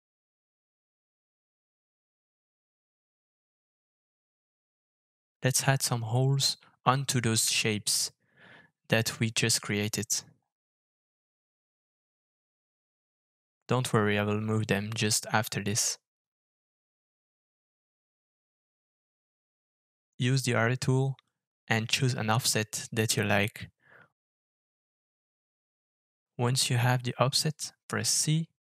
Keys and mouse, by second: 1.1 Tab, 2.8 alt+f, 5.4 middle click, 6.3-8.3 middle drag, 8.7 alt+f, 19.5-28.6 middle drag.